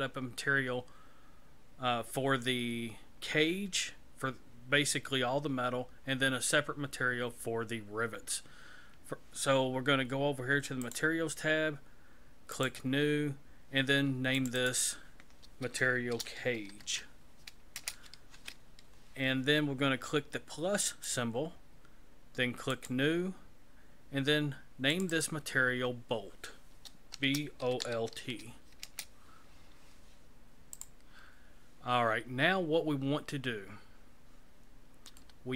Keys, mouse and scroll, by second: 10.8 click, 12.5 click, 14.4 click, 14.6 click, 20.9 click, 22.7 click, 24.9 click, 25.1 click, 30.7 click, 35.2 shift+middle click.